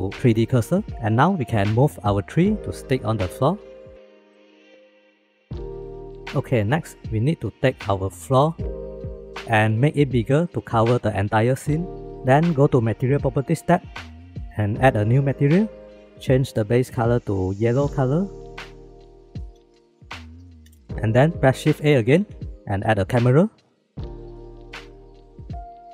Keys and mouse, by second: 2.6 KP_3, 3.3 shift+middle click, 4.2 shift+middle drag, 4.7 g, 9.3 middle drag, 9.5 click, 9.9 s, 15.4 click, 21.7 shift+a, 25.4-25.9 drag.